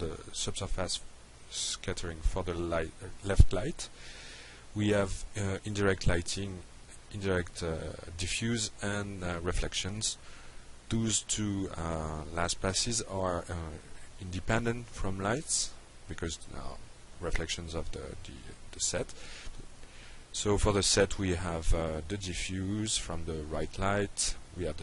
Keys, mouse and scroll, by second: 0.2 click, 3.9 click, 7.7-8.3 drag, 11.4 click, 13.6 click, 19.1-20.1 drag, 21.7 drag.